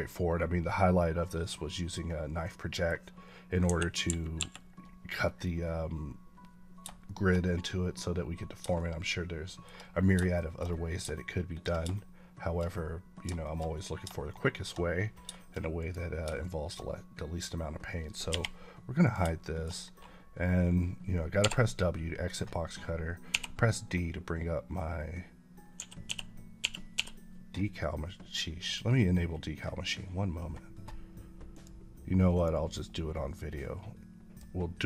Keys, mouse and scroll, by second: 2.4 middle click, 3.5 KP_1, 5.1 scroll up 1, 6.9 shift+middle click, 7.3 scroll up 1, 8.6 shift+middle click, 10.2 shift+middle click, 10.7 scroll down 1, 11.0 shift+middle click, 11.8 shift+double middle click, 13.3 shift+middle click, 14.2 shift+middle click, 15.7 click, 16.3 shift+middle click, 18.2 h, 19.0 click, 19.3 shift+middle click, 21.3 w, 26.0-26.8 typing, 31.4 click, 33.8 click, 34.4 click.